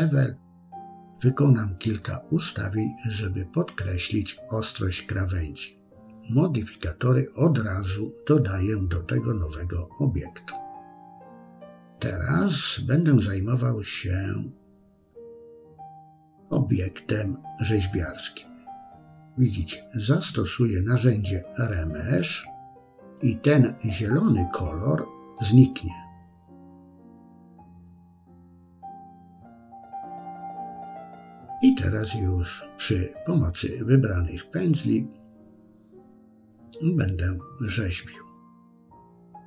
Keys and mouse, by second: 5.0 click, 5.7 click, 6.2 click, 7.1 click, 7.4-8.3 middle drag, 9.6 click, 11.3-13.3 drag, 14.5 Tab, 16.4-18.0 middle drag, 20.2-27.3 drag, 27.7-29.8 middle drag, 31.3 KP_3, 35.3 f, 36.4 click, 36.8 click, 37.1 middle click, 37.5 click, 37.8 middle click, 38.2 click, 38.7 middle click, 39.2 shift+middle click.